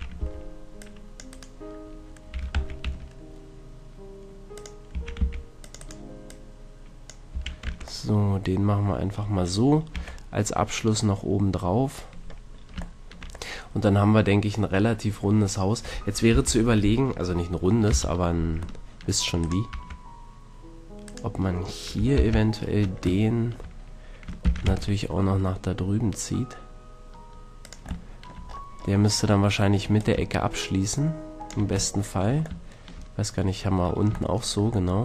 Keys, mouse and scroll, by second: 0.2 c, 2.3 e, 4.6-5.7 drag, 4.9 a, 5.2 c, 7.3 a, 7.7 Tab, 9.9 a, 13.0-15.2 middle drag, 16.2 KP_3, 17.9 ctrl+KP_1, 19.4-20.6 drag, 19.7 Tab, 20.7 click, 22.1 ctrl+l, 22.6 middle click, 23.2 middle click, 24.4 shift+d, 27.8-29.9 drag, 29.9 middle click, 30.0-31.9 drag, 31.9 middle click, 32.6 shift+scroll, 34.5 middle click.